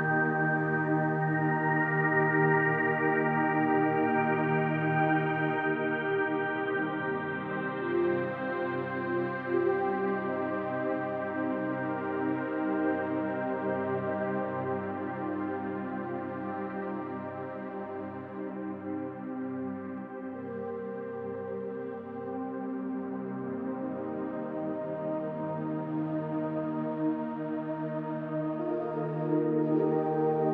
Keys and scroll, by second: 0.9 ctrl+alt+z, 19.9 space.